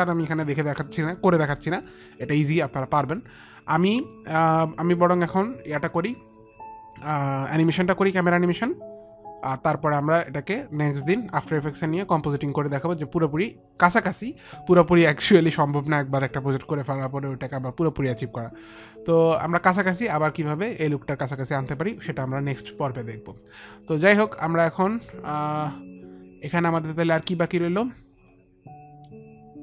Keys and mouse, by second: 23.7 click.